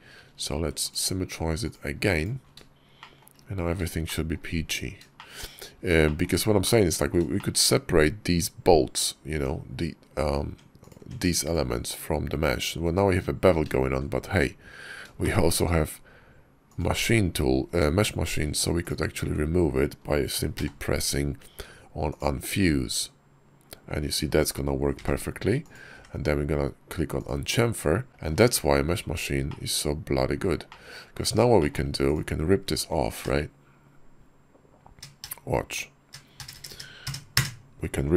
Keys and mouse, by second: 2.8 shift+click, 3.9 shift+click, 5.0 shift+click, 5.9 shift+click, 6.5 click, 7.2 shift+click, 8.7 click, 9.2 Tab, 10.3 Tab, 10.7 click, 11.0 Tab, 11.3 click, 15.1 shift+click, 15.4 middle click, 20.5 y, 25.8 y, 28.1 shift+click, 28.1 shift+middle click, 29.3 middle click, 30.5 middle click, 31.4 shift+click, 31.9 click, 33.1 ctrl+KP_Add.